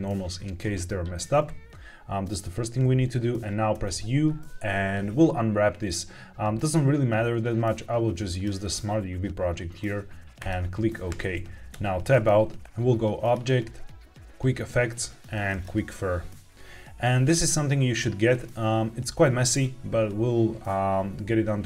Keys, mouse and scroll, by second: 3.6 u, 11.6 Tab, 13.1-15.9 drag.